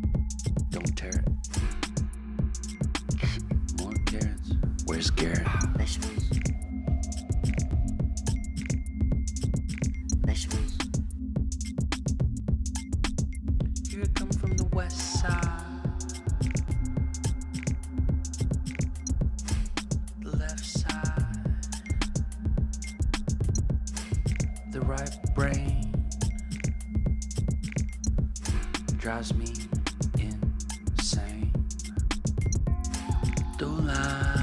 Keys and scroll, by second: 1.3 Up, 1.5 Left, 1.7 Left, 1.8 Down, 3.6 space, 5.0 ctrl+y, 6.1 ctrl+t, 7.6 Return, 14.7-18.1 typing, 18.6 Return, 19.4 ctrl+t, 22.5 Return, 33.0 Delete, 33.8 Delete, 34.0 ctrl+z.